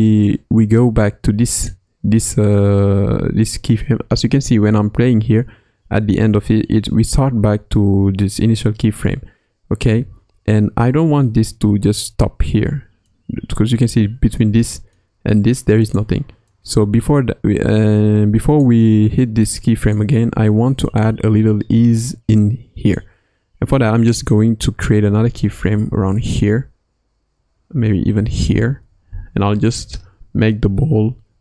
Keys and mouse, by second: 1.5 click, 4.5 space, 9.9 space, 11.6 space, 12.4 space, 13.0-15.0 drag, 15.8 click, 16.4-18.6 drag, 19.8 click, 20.8 click, 27.3 Right, 30.5 g.